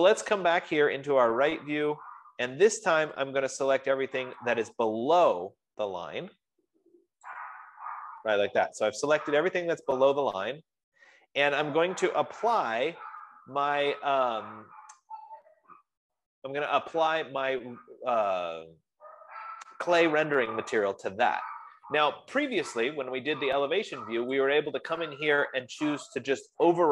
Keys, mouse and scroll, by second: 0.7 middle click, 1.6 scroll, 2.7 scroll, 4.0 click, 8.3 click, 8.8 scroll, 9.5-10.7 scroll, 24.8-26.9 drag.